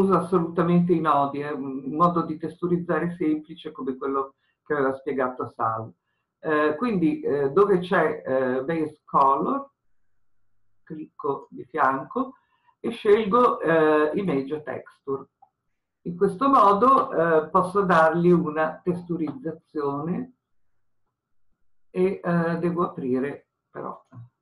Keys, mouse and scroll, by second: 14.2-24.4 drag.